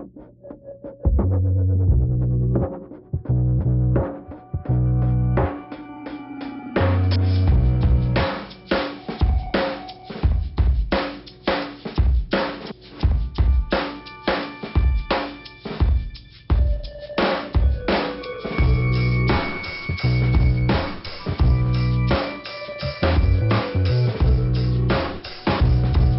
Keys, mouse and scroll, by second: 0.3 click, 1.1 click, 1.9 click, 3.0 click, 3.6 click, 4.2 right click, 7.0 scroll down 1, 10.4 click, 12.0 click, 12.9 click, 14.0 click, 15.7 click, 17.0 click, 22.7 right click.